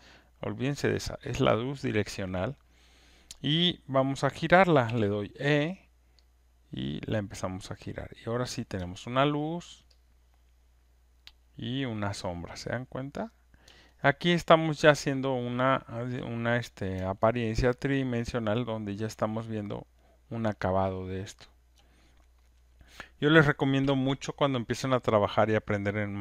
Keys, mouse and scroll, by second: 0.8-6.0 drag, 4.8 e, 8.3 click, 8.3 e, 9.3 alt+middle click, 9.8 alt+right click, 12.0 alt+click, 13.6 click, 16.0 alt+click, 16.6 click, 17.3 alt+middle click, 19.8 alt+click, 19.8 alt+right click, 20.4 alt+right click, 20.8 alt+middle click, 21.2 alt+right click, 21.7 alt+click.